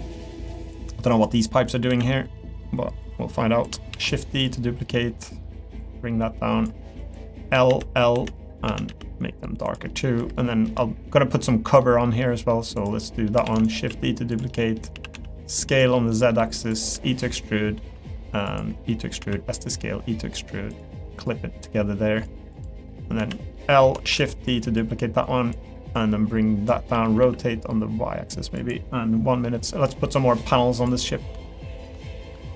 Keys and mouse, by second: 0.0 middle click, 1.3 click, 2.1 middle click, 3.1 click, 3.9 shift+d, 4.5 click, 5.8 click, 7.0 click, 8.7 a, 8.9 g, 9.9 middle click, 10.2 3, 10.3 middle click, 10.8 shift+middle click, 11.4 middle click, 12.2 middle click, 12.8 click, 13.0 middle click, 13.4 shift+d, 13.9 s, 14.5 middle click, 15.9 middle click, 16.3-19.8 typing, 21.3 click, 23.5 middle click, 24.0 shift+d, 24.8 click, 26.0 click, 26.9 r, 29.4 middle click, 29.9 middle click, 31.0 middle click, 31.8 shift+click, 32.0 middle click.